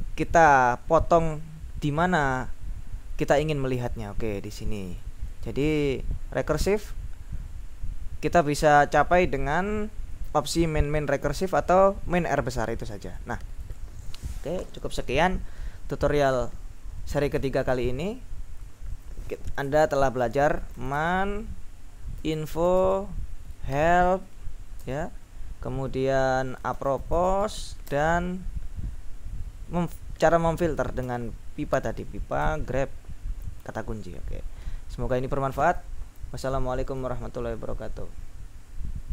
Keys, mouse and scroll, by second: 3.5-6.1 drag, 11.6 click, 12.8-14.3 drag, 17.7 click, 18.0 click, 18.2 click, 18.6-19.7 drag, 20.4-24.9 typing, 26.4-28.0 typing, 31.1 shift+\, 32.5 BackSpace, 37.4 click.